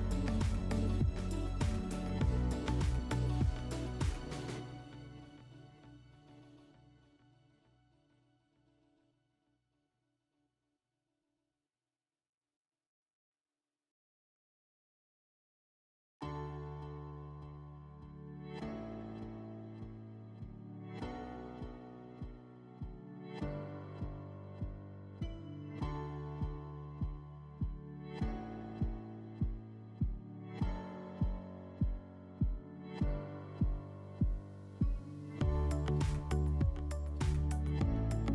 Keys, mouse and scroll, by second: 11.0 middle click, 13.0 scroll, 13.5 middle click, 17.6 middle click, 19.6 middle click, 30.6-32.7 middle drag.